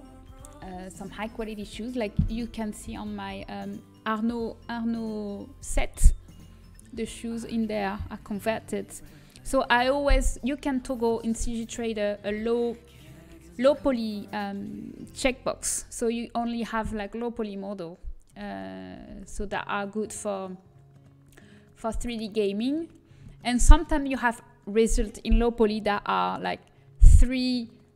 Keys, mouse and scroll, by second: 17.4-19.7 middle drag, 19.7 g, 20.6-22.4 middle drag, 23.5-27.0 middle drag.